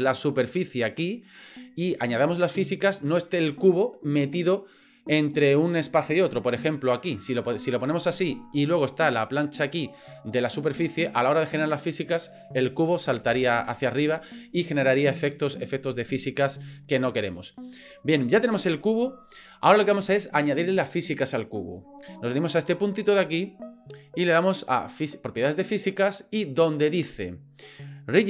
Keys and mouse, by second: 6.9 click, 13.2 ctrl+z, 17.1-18.3 middle drag, 24.6 click.